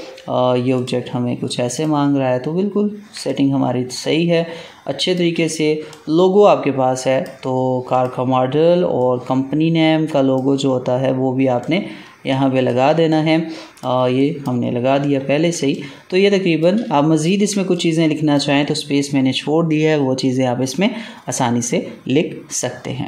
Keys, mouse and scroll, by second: 2.2 alt+scroll down 1, 3.1 space, 3.2 click, 3.6 space, 5.8 click, 5.9-11.5 drag, 12.9 space, 13.0 click, 13.4 space, 14.1 click, 14.9 Delete, 15.6 click, 16.1 space, 17.1 click, 17.5 ctrl+space, 17.7 ctrl+click, 17.9 ctrl+space.